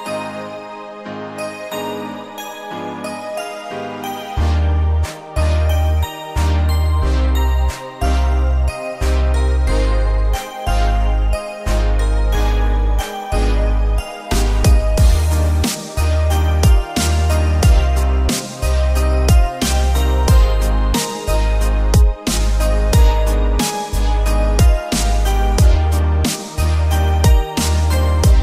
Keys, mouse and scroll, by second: 4.7 click, 6.2 click, 6.8 click, 7.4 click, 7.7 scroll down 2, 8.1-9.8 middle drag, 10.5 shift+a, 13.7-15.5 drag, 15.7-17.1 drag, 16.6 KP_0, 17.4-18.5 drag, 18.8-19.7 drag, 21.1 KP_1, 22.2-23.4 drag, 24.4-26.3 drag, 26.9 scroll up 2.